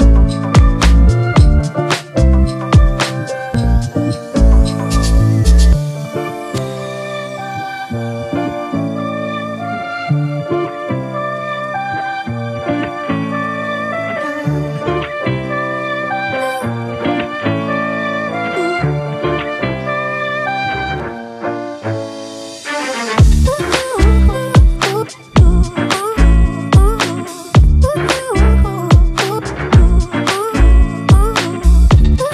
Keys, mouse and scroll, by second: 3.6-4.0 typing, 5.7 typing, 12.2-12.8 scroll up 1, 12.8 typing.